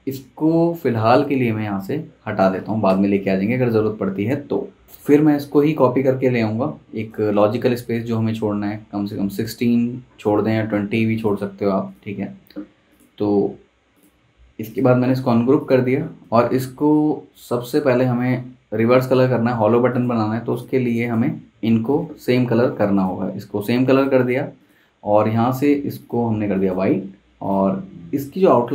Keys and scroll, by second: 2.9 BackSpace, 22.5 i.